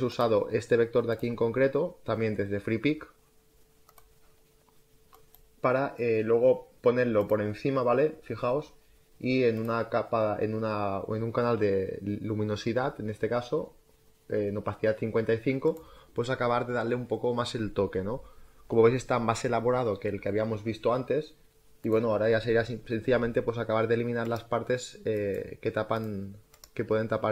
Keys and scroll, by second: 3.9 space, 22.9 e.